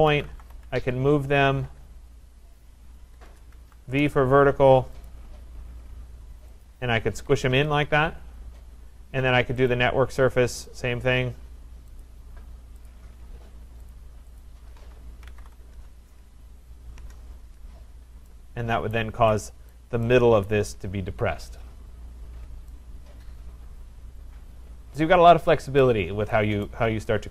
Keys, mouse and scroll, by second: 0.0-1.7 typing, 1.7 Return, 2.8 \, 3.3 BackSpace, 3.6 v, 3.8 Return, 5.1 click, 6.7 click, 7.2 Escape, 7.3 Escape, 7.5 Escape, 9.7 click, 10.8 click, 12.0 shift+click, 12.9 click, 13.9 click, 14.4 click, 15.0-16.3 typing, 17.0 Return, 17.8-18.3 scroll, 18.3-18.9 scroll, 18.9 right click, 19.7 right click, 20.5 right click, 20.9 middle click, 20.9 typing, 25.0 right click, 25.8 right click, 26.7 right click.